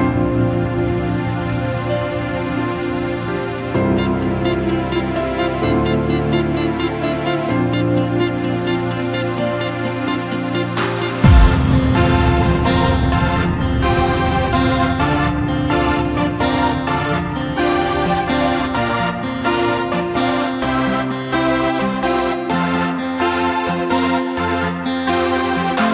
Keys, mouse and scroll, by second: 12.2 click, 12.9-13.9 middle drag, 13.9-15.0 scroll down 3, 15.0-16.2 middle drag, 16.2 Delete, 17.6-18.7 scroll up 4, 18.7-19.5 scroll down 4, 19.5 KP_1, 20.3-22.1 scroll up 4, 22.1 click, 22.7-24.0 scroll up 1, 24.0 click, 24.9 g.